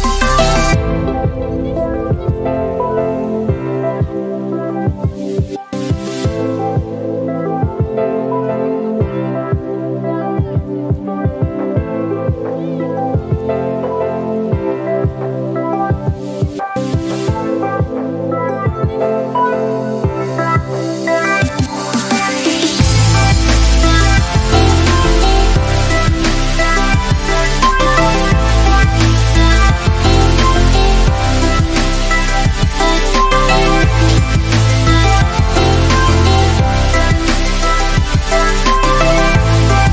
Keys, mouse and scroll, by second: 0.8 ctrl+space, 1.1 ctrl+click, 1.3 ctrl+space, 1.9 click, 2.3 typing, 3.2 alt+click, 5.8-9.9 drag, 11.0 space, 11.2-11.7 click, 11.7 space, 12.5-14.8 drag, 25.8 space, 26.0 click, 26.4 space, 28.4 click, 28.8 alt+click, 29.3 space, 29.5-30.1 click, 29.8 space, 30.7-31.9 drag.